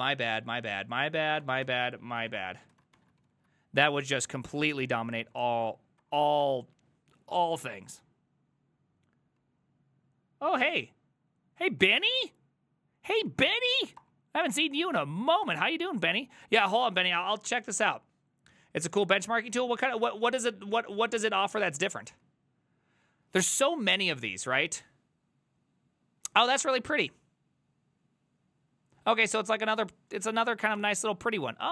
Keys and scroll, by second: 0.0-3.0 typing, 2.0 ctrl+c, 3.2 ctrl+c, 3.4 ctrl+c, 4.3 ctrl+a, 4.5 3, 4.7 ctrl+c, 5.0 Up, 5.2 Up, 6.0 Up, 6.5 Return, 11.8 Up, 12.2 Up, 13.3 Up, 14.0 Return, 14.5 ctrl+a, 14.7 ctrl+a, 15.0 Up, 15.5 Return.